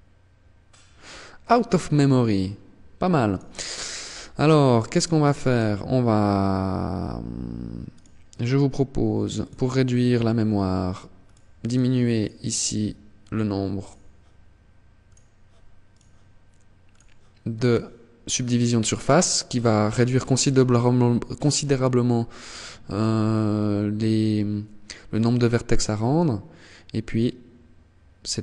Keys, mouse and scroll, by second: 2.4 click, 3.9 right click, 4.7 right click, 7.1 right click, 8.5 click, 10.4 click, 10.8 click, 11.3 click, 13.0 right click, 14.2 click, 15.1 right click, 16.0 click, 16.8 right click, 17.7 click, 21.5 click.